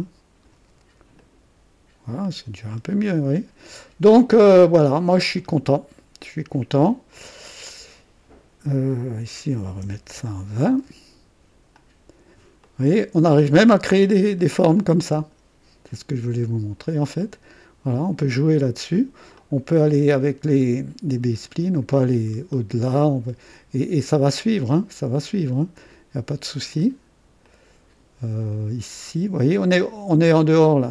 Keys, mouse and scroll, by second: 1.2 click, 2.2-3.8 drag, 2.6-3.3 typing, 4.3 click, 5.3 right click, 6.4 typing, 7.1 click, 9.6-11.6 typing, 10.0 KP_Enter, 11.7 click, 12.6 click, 13.9 click, 14.7 click, 16.2 click, 16.5 typing, 17.2 right click, 19.3 click, 21.0-25.2 drag, 27.4 click, 29.6-30.9 drag.